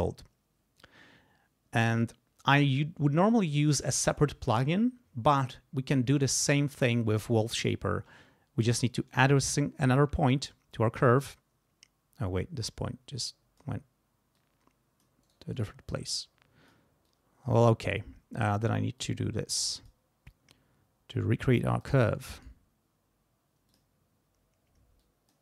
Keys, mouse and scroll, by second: 9.1 right click, 10.4-13.8 drag, 14.3 click, 15.2 right click, 15.5 right click, 16.1 click, 17.1-18.6 drag, 19.0 click, 21.1 click, 22.3 right click, 23.7 click, 25.0 click.